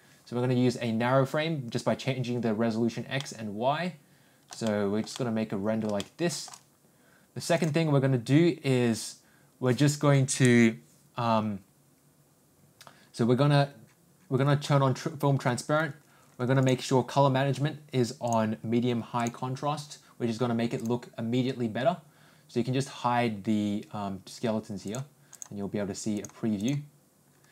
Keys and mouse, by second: 3.1-5.0 middle drag, 5.1 middle click, 5.9 shift+middle click, 7.5 click, 16.6 click, 18.4 click, 25.3 click, 26.1 click, 26.5 click.